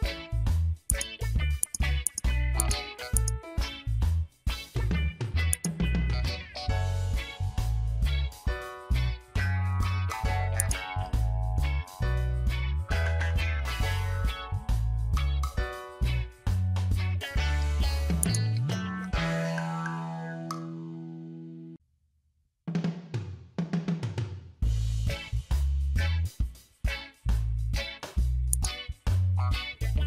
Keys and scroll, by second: 7.8 ctrl+j, 9.0 ctrl+t, 14.7 Return, 16.1 ctrl+j, 17.0 ctrl+t, 23.4 Return.